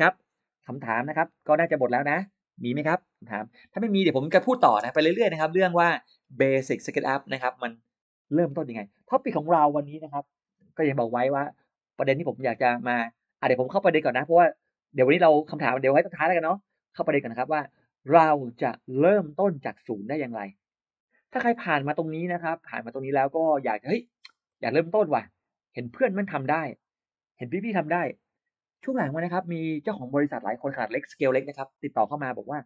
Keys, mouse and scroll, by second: 3.8-4.4 scroll down 2, 4.2 middle click, 4.8 space, 4.8 click, 5.1 click, 5.7 middle click, 6.0-6.6 scroll down 2, 6.6 Delete, 23.4 click, 24.3-24.7 scroll up 1.